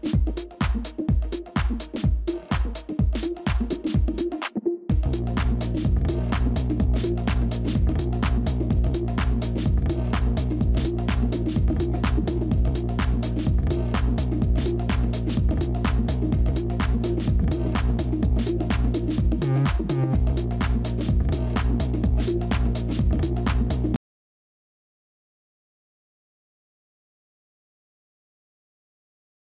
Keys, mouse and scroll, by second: 0.3 shift+click, 1.7 typing, 5.5 typing, 11.6 shift+click, 12.8 shift+click, 14.1 shift+click, 15.1 shift+click, 17.9 typing, 20.3 typing.